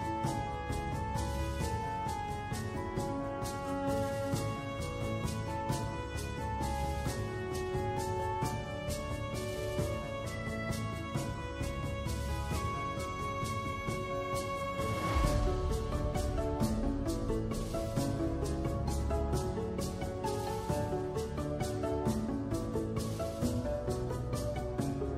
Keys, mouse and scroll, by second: 0.4 ctrl+2, 0.4 ctrl+3, 1.2 ctrl+1, 1.5 ctrl+2, 1.9 ctrl+3, 2.3 ctrl+4, 3.6 Tab, 5.2 click, 5.8 Tab, 6.2 Tab, 6.7 click, 7.5 click, 7.6 click, 8.6 w, 8.9 click, 9.7 alt+scroll up 1, 9.9 alt+middle click, 10.0-11.7 alt+drag, 12.3-13.9 shift+right drag, 15.2 alt+click, 16.0 click, 16.2 Tab, 16.5-17.0 alt+drag, 17.5 alt+drag, 17.9 alt+drag, 18.2 alt+click, 18.4 Tab, 19.2 click, 19.7-21.1 shift+right drag, 21.6 Tab, 21.9-24.4 alt+drag.